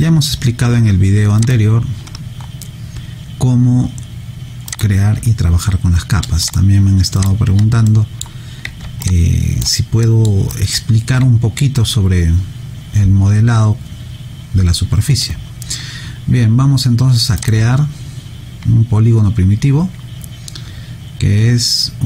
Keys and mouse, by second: 1.4 click, 4.7 click, 7.9 alt+middle click, 9.0 alt+click, 10.0 alt+middle click, 10.5 alt+right click, 17.4 click.